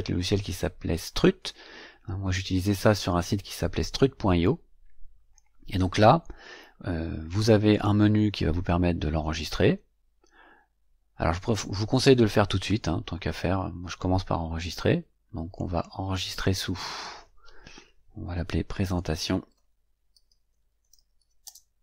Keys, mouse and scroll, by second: 7.7 click, 15.5 click, 16.8 click, 18.6-21.8 typing, 20.1 shift+click.